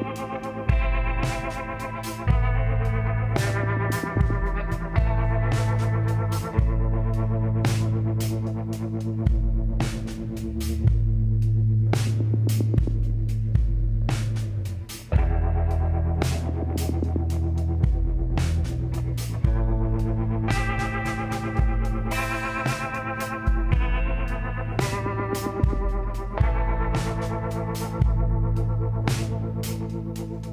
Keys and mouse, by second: 0.9 click, 2.2 s, 4.3-5.6 middle drag, 5.8 KP_1, 8.1 s, 12.9 s, 14.1 KP_7, 15.2 z, 16.9 s, 20.6-22.6 middle drag, 22.6-24.4 drag, 24.6 middle click, 25.4 z, 28.6-30.5 middle drag.